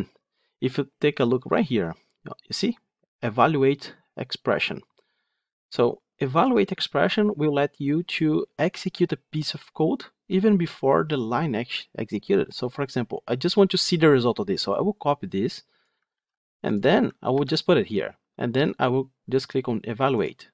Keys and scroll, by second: 6.5 alt+F8, 16.0 ctrl+c, 17.2 ctrl+v.